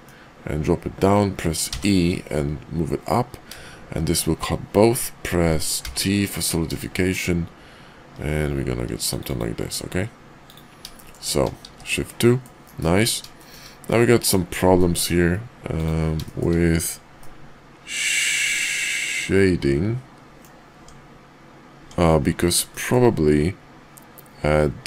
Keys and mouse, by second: 10.9 shift+middle click, 11.6 shift+2, 12.0-12.4 middle drag, 12.6 KP_5, 13.4 shift+middle click, 14.2 click, 14.7-15.1 middle drag, 15.6 click, 16.2 shift+middle drag, 17.1-20.4 middle drag, 20.7 Tab, 21.7 Tab, 22.7 shift+middle drag.